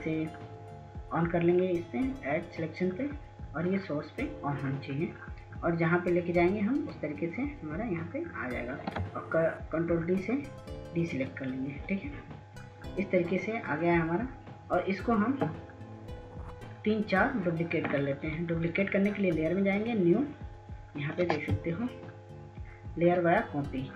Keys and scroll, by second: 11.0 ctrl+d, 21.8 ctrl+s, 22.6 ctrl+s, 23.5 ctrl+s.